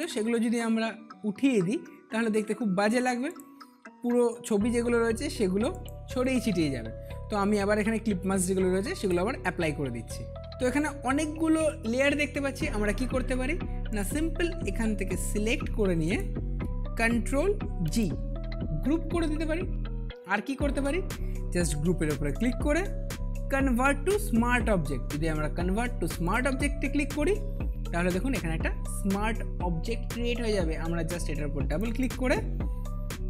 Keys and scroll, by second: 17.8 ctrl+g.